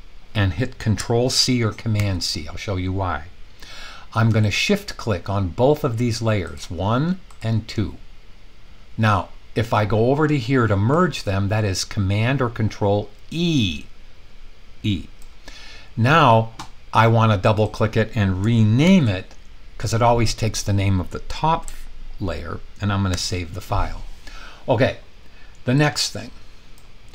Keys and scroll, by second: 1.9 super+c, 18.8 super+v, 23.1 super+s.